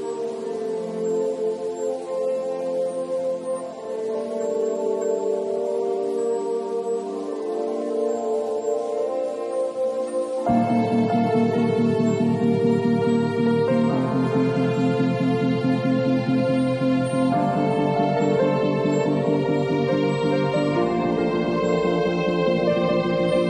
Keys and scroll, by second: 0.7 0, 1.6 [, 3.8 [, 8.5 ], 11.7 [.